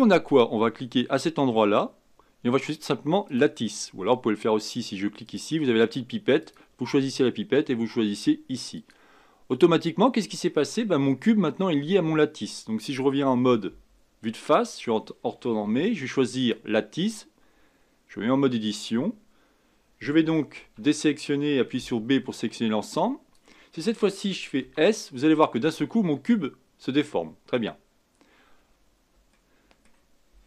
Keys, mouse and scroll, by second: 1.6-4.6 drag, 5.2 click, 6.4 click, 13.6 KP_1, 16.4 click, 18.3 Tab, 20.5 a, 21.7 b, 24.6 s, 29.3-30.4 middle drag.